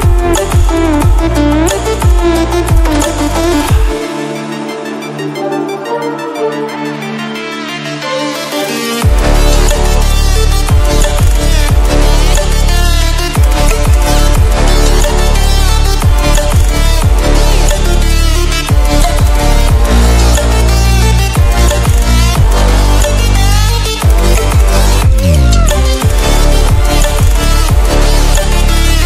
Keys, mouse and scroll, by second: 0.8 scroll up 1, 1.2-2.0 scroll down 1, 2.3 scroll up 1, 4.5-5.1 scroll down 1, 5.3-14.0 drag, 14.6 scroll up 1, 16.2-24.8 drag, 25.6 scroll down 1, 27.0 scroll up 1, 27.1-29.0 scroll down 1.